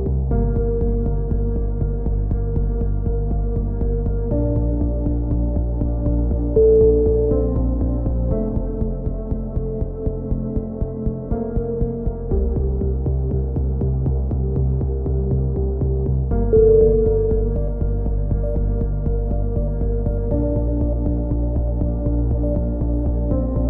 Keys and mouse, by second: 0.3 KP_3, 1.4 KP_3, 2.5 e, 3.3-4.3 drag, 8.6 c, 9.2 click, 10.0 s, 11.7 c, 12.1-13.6 drag, 15.1 a, 15.3 middle click, 15.8-16.8 drag, 17.3 b, 18.3-19.3 drag, 19.3 a, 19.6 c, 20.3 click, 23.4 a.